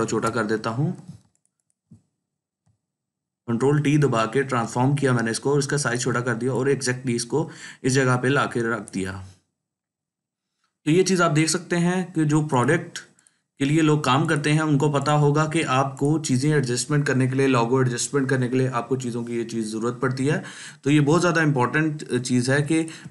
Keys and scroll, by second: 13.9 ctrl+space, 14.4 ctrl+space, 15.0 ctrl+space, 22.4 ctrl+space.